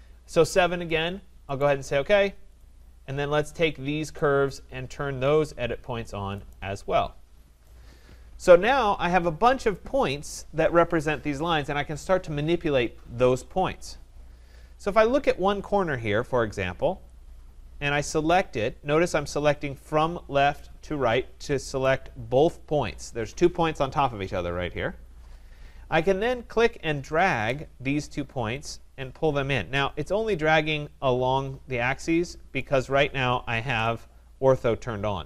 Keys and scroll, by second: 33.6 ctrl+z.